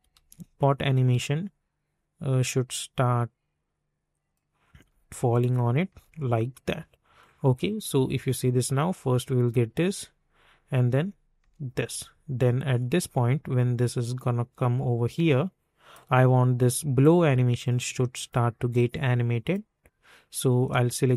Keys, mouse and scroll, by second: 0.1 ctrl+z, 0.6-4.7 drag, 4.7 space, 7.1 click, 7.8 space, 11.3 space, 12.7-21.1 drag.